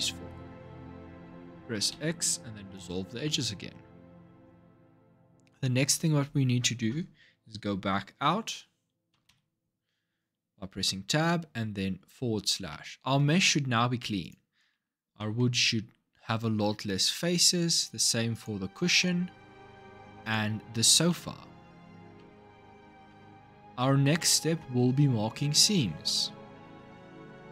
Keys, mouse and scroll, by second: 1.7 x, 2.9-5.9 scroll down 2, 8.9 Tab, 9.1 KP_Divide, 12.5-14.0 middle drag, 14.0 click, 14.5 Tab, 15.0-17.1 middle drag, 17.1 Tab, 17.5 click, 18.1 click, 18.5 Tab, 18.8 middle click, 19.5 Tab, 20.0 click, 20.5 Tab, 20.9-22.0 middle drag, 22.0 Tab, 22.9-27.0 middle drag.